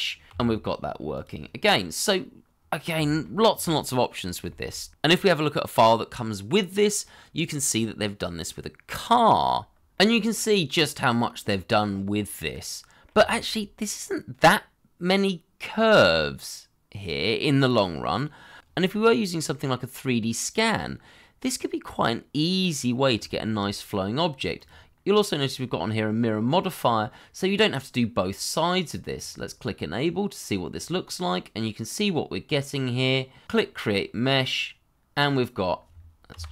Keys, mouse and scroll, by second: 0.3 g, 1.7 middle click, 3.0 shift+middle click, 3.5 middle click, 4.4 shift+middle click, 8.1 shift+z, 11.2 scroll down 1, 13.2 shift+middle click, 13.7 middle click, 19.7 shift+middle click, 20.0 middle click, 23.8 shift+middle click, 24.1 middle click, 26.8 middle click, 31.6 middle click, 35.2 middle click, 36.3 g.